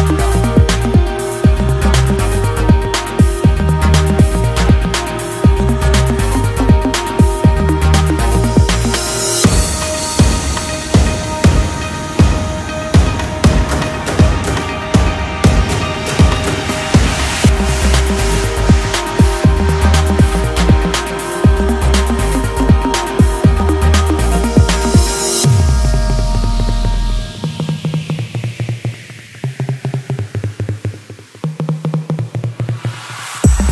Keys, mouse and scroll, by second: 12.7-17.7 drag, 18.7 click, 24.7 Tab, 26.7-29.8 ctrl+middle drag, 31.6 click.